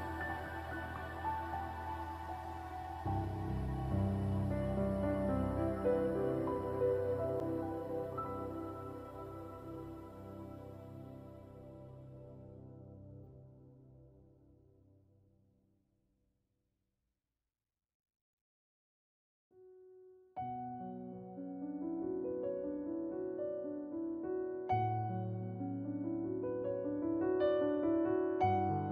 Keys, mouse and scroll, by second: 0.4-5.0 drag, 5.3 alt+click, 5.8 alt+right click, 8.5 alt+click.